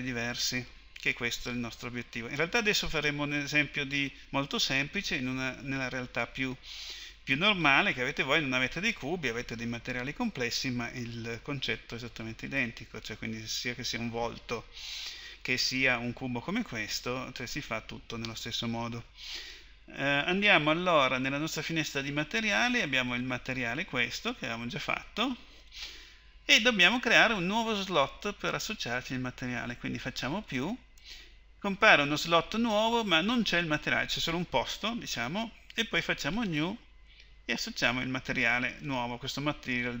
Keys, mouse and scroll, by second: 21.7-24.9 drag, 30.3-34.0 drag, 36.4-40.0 drag.